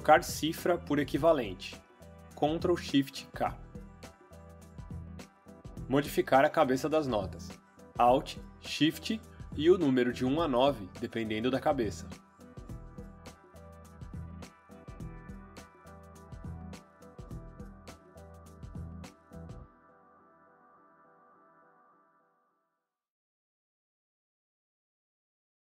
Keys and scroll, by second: 3.9 ctrl+shift+k, 9.7 alt+shift+1, 11.4 alt+shift+2, 13.6 alt+shift+3, 15.6 alt+shift+4, 17.3 alt+shift+5.